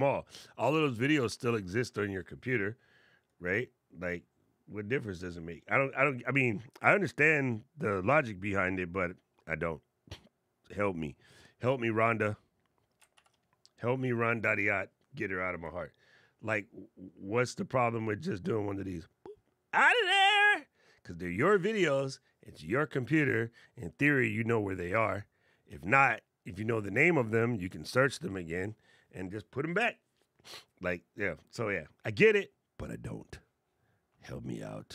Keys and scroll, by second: 12.9 shift+super+b.